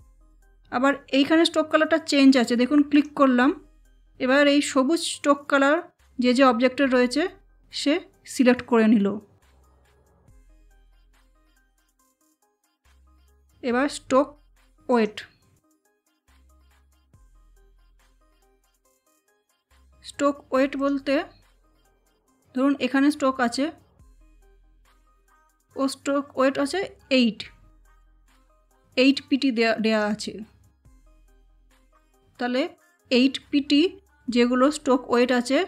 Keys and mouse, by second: 2.9 click, 12.8 click, 14.9-18.7 drag, 20.8 click, 24.6 click, 29.9 click, 32.0 click.